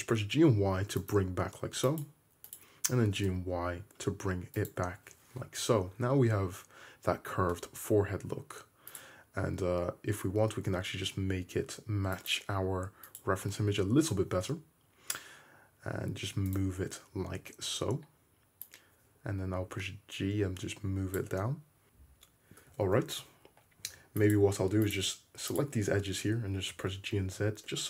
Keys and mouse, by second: 1.1 middle click, 1.9 click, 2.0 middle click, 2.5 click, 2.6-8.9 middle drag, 3.1 g, 7.5 `, 8.9 click, 9.0 middle click, 9.8-13.1 drag, 9.8-14.4 right drag, 10.4 g, 13.2-17.1 drag, 13.9 g, 16.6-16.9 right drag, 17.1-18.7 middle drag, 17.1 `, 18.7-24.4 drag, 21.8 `, 22.9 alt+z, 23.9 2, 24.4-25.5 middle drag, 25.5 shift+click, 25.7 middle click, 26.4-27.8 drag, 26.4 g.